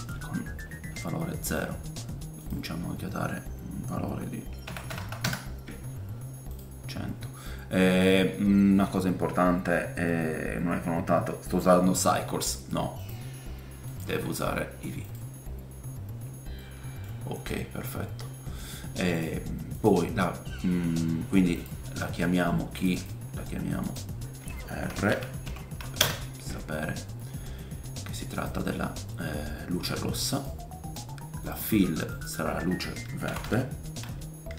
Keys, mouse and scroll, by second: 2.4-19.2 drag, 5.0 KP_0, 16.6-19.2 middle drag, 16.6-28.4 right drag, 19.7 click, 19.7 middle click, 21.5 click, 21.5 middle click, 22.8 click, 22.8 middle click, 22.9-29.6 drag, 22.9-28.4 middle drag, 29.1 middle click, 30.3 click, 31.4-34.5 drag.